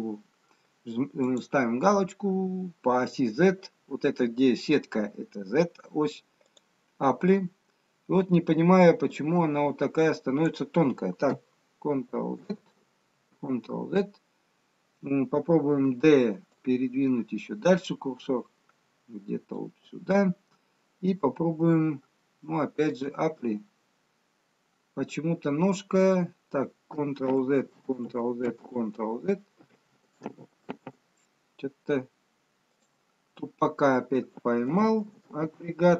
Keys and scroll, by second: 12.4 ctrl+z, 13.4 ctrl+z, 15.9 d, 27.3 ctrl+z, 28.7 ctrl+z, 30.6 ctrl+z, 34.8 ctrl+z, 35.4 ctrl+z.